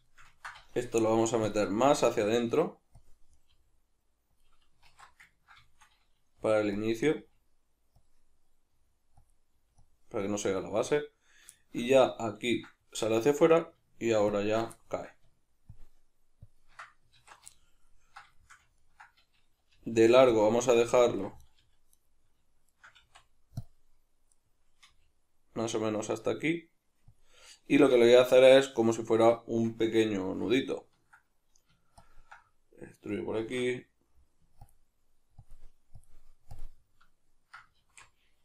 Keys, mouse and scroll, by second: 0.1-1.5 ctrl+shift+middle drag, 0.9 g, 1.5 click, 1.7 z, 2.4 g, 3.1 click, 3.4 right click, 3.5 g, 4.5 click, 4.9 alt+q, 5.3-6.9 ctrl+middle drag, 6.4 g, 6.9 click, 7.0 right click, 7.2 g, 8.1 click, 8.7 g, 9.3 click, 9.5 g, 9.9 click, 10.2 right click, 10.5 g, 11.0 click, 11.6-14.3 shift+middle drag, 14.3 ctrl+click, 14.8-15.7 shift+middle drag, 15.7 ctrl+click, 16.4 ctrl+click, 17.2 alt+q, 17.6-20.4 ctrl+middle drag, 19.7 g, 20.4 click, 20.6 z, 21.0 ctrl+middle click, 21.4 right click, 21.6 g, 22.0 right click, 22.6 shift+right click, 23.0 x, 24.3 right click, 24.9 g, 27.2 click, 30.6-32.0 ctrl+middle drag, 32.0 ctrl+click, 33.4 alt+q, 34.7 ctrl+click, 35.4 ctrl+click, 36.0 ctrl+click, 36.5 ctrl+click, 37.8 alt+q.